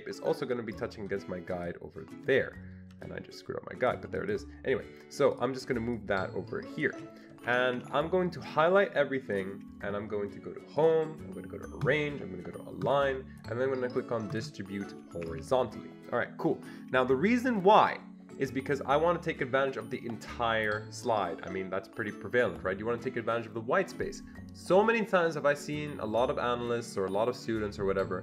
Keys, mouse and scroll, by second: 1.5 click, 3.3 double click, 5.4 double click, 6.0-7.8 shift+drag, 7.5 Escape, 7.7 Escape, 7.8 Escape, 8.8 click, 11.8-12.9 drag, 12.9 click, 14.3 click, 15.1 Escape, 15.3 Escape.